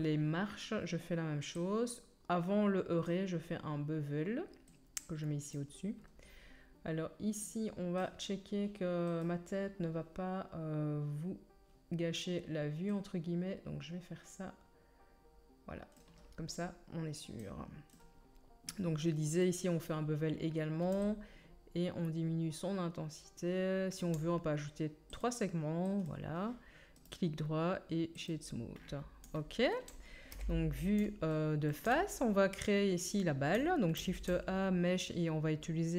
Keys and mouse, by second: 1.6-5.6 middle drag, 5.6-7.4 drag, 7.4-26.2 middle drag, 27.1 right click, 27.2-30.9 middle drag, 30.3 KP_1, 34.0 shift+middle click, 34.0 shift+a, 34.2 shift+middle click.